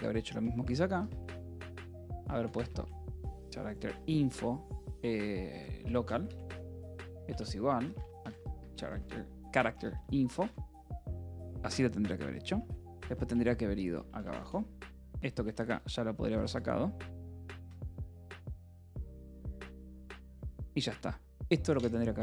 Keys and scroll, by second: 0.0-4.3 typing, 5.7-10.6 typing, 10.8 Escape, 12.2-19.2 typing, 20.0 Return, 20.2 Escape, 21.1 ctrl+s.